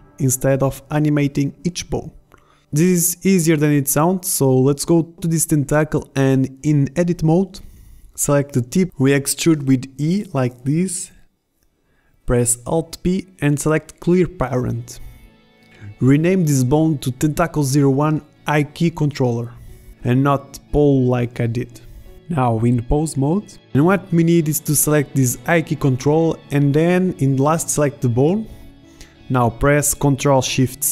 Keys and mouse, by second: 6.1 KP_7, 7.5 e, 12.2 alt+p, 16.1 Tab, 22.1 ctrl+z, 29.9 ctrl+shift+c.